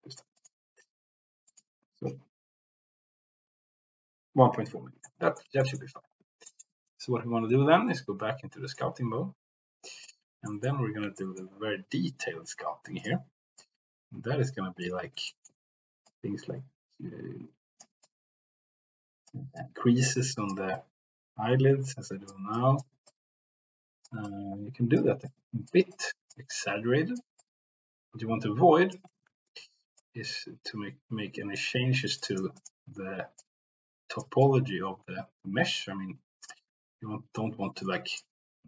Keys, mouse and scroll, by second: 0.4 click, 1.5-3.6 drag, 5.0 middle click, 5.8 middle click, 6.5 shift+middle drag, 10.0 click, 10.4 middle click, 11.1 shift+middle click, 13.0 click, 13.6-14.8 drag, 15.2 shift+middle click, 16.0-17.8 drag, 18.0-19.3 drag, 19.5 click, 20.6-22.3 drag, 22.5 click, 23.0-24.1 drag, 24.2 click, 25.2 click, 25.9 click, 26.4 click, 27.4-28.9 drag, 29.5 ctrl+z, 30.0-31.5 drag, 32.1 click, 32.5 click, 33.3 click, 34.4-36.4 drag, 38.1-38.6 drag.